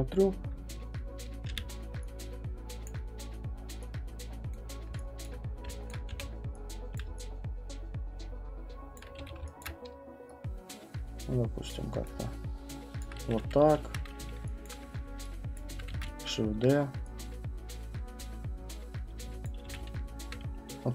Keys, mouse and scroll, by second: 1.5 r, 2.9 click, 3.2 middle click, 4.5 click, 4.7 middle click, 4.9 middle click, 5.2 alt+click, 5.9 alt+click, 6.1 r, 6.9 click, 8.9 alt+click, 9.2 w, 9.7 click, 12.1 click, 13.0 alt+click, 14.7 alt+click, 15.5 click, 15.9 ctrl+d, 16.5 v, 19.4-20.9 typing, 19.5 click.